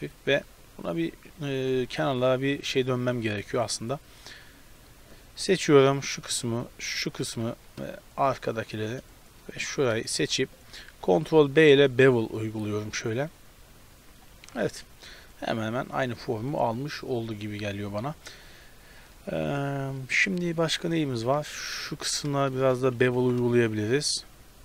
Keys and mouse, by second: 0.2 Tab, 1.7 Tab, 3.7-4.7 drag, 4.7-7.3 middle drag, 7.3 z, 9.1 middle click, 9.6 z, 11.1 ctrl+b, 14.5 Tab, 14.7-17.8 middle drag, 20.3-21.5 middle drag, 21.5 Tab, 21.8 a, 22.4-24.1 right drag, 23.2 ctrl+b.